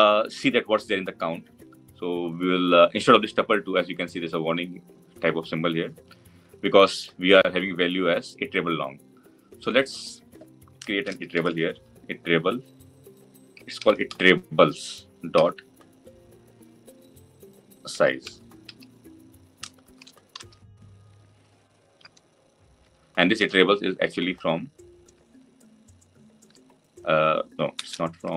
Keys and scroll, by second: 27.9 alt+Return.